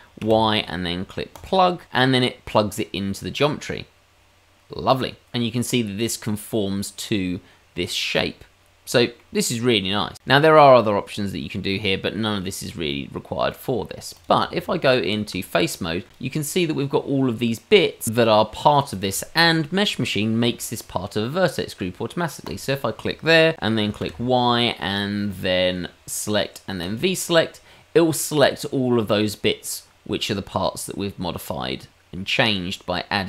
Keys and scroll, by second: 0.1 y, 14.5 Tab, 24.0 y.